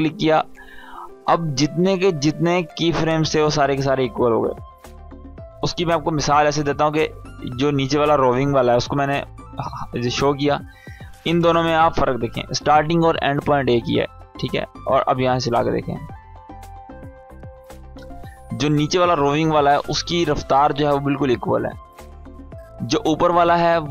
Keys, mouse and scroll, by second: 0.4-3.9 drag, 5.2 ctrl+z, 7.5-10.9 drag, 14.1 space, 17.2 space, 18.2 click, 19.9 space, 22.0 space, 22.4-23.3 click, 23.8 space.